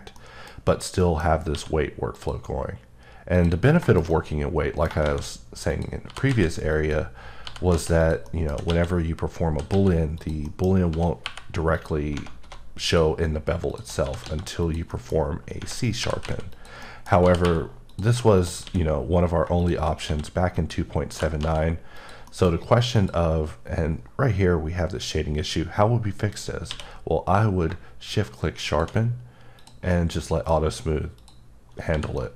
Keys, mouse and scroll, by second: 0.1 middle click, 0.5-0.9 scroll down 2, 1.0 middle click, 1.2 scroll, 1.5 q, 2.1 click, 2.8-3.3 scroll up 3, 3.3 click, 3.6 scroll, 3.8 shift+middle click, 5.0 shift+a, 5.7 click, 6.0 g, 6.7 click, 7.4 g, 8.0 click, 8.3 middle click, 8.4 s, 9.5-11.2 typing, 10.1 click, 10.4 middle click, 10.6 scroll, 11.7 click, 12.4 typing, 12.8 click, 13.7 click, 14.0 s, 14.6 click, 14.9 middle click, 15.1 scroll up 1, 16.5 click, 16.8 middle click, 17.2 g, 17.9 click, 18.3 click, 18.6 q, 19.6 shift+click, 20.0 q, 20.5 click, 21.1 g, 21.9 click, 22.3 middle click, 22.5-22.9 scroll up 1, 22.9 click, 27.5 q, 28.6 shift+click, 29.9 middle click, 31.1 click, 31.9 h, 32.1 middle click.